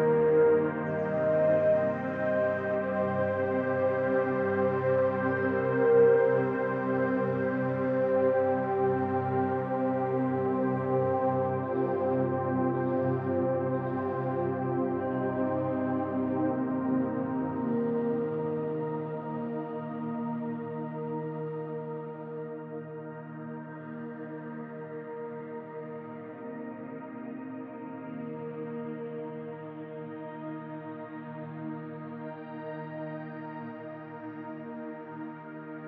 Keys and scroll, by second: 15.2 alt+space.